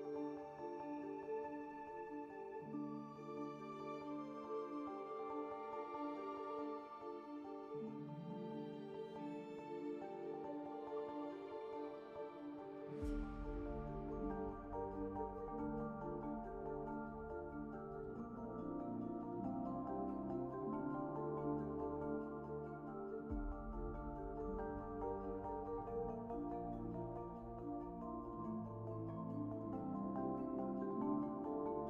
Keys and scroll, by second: 2.6 a, 6.4 4, 7.1 `, 7.6 2, 8.2 q, 12.8 alt+c, 20.4 2, 22.0 4, 24.2 alt+z, 30.1 5, 31.3 w.